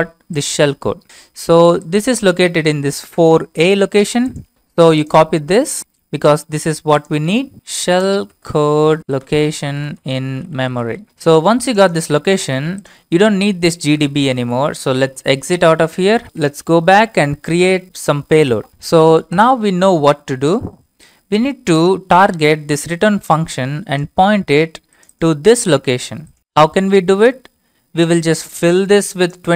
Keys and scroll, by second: 5.8 ctrl+c, 7.3-11.4 typing, 13.7-16.6 typing, 20.6 alt+Tab, 25.6 ctrl+c.